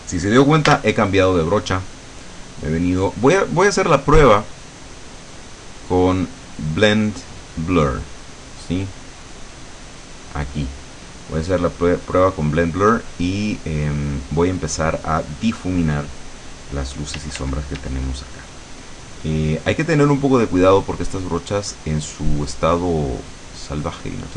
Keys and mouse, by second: 0.8 b, 2.2-4.7 drag, 9.9 click, 17.3 d, 18.8-22.6 drag, 23.6-24.3 drag.